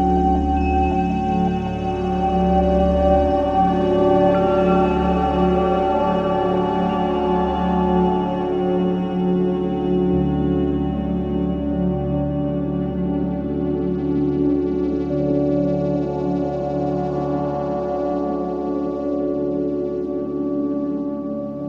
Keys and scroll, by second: 2.0 4, 3.5 3, 4.7 Delete, 5.5 4, 6.3 ctrl+d, 6.5 Escape, 13.4 Delete.